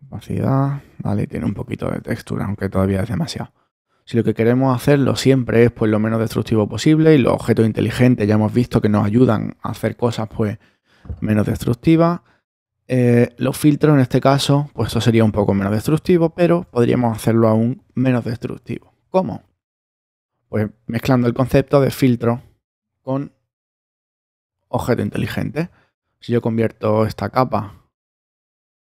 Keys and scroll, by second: 18.9 alt+super+z.